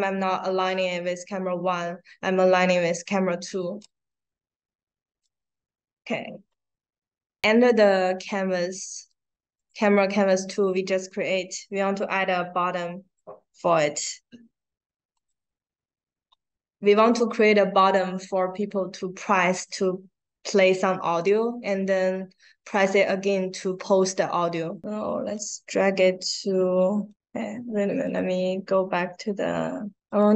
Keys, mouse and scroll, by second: 3.7-5.1 drag, 9.5 click, 10.0 right click, 15.1 click, 25.3 click, 27.1 right click, 27.9 right click, 30.0 click.